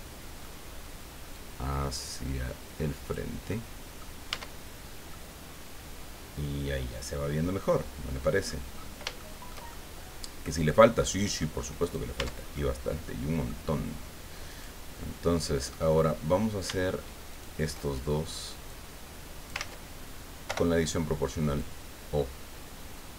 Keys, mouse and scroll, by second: 1.3-3.3 right drag, 3.5 right click, 4.3 Tab, 4.7-5.0 scroll down 2, 5.1-8.6 drag, 8.7-9.0 scroll up 3, 9.2 shift+click, 9.7 shift+middle click, 10.0 click, 10.8 click, 11.8 right click, 12.2 Tab, 12.5-13.6 middle drag, 14.5 right click, 15.5 middle click, 17.3 shift+right click, 18.7 click, 19.6 ctrl+z, 20.4 o, 21.6 click, 22.4-23.1 scroll down 2.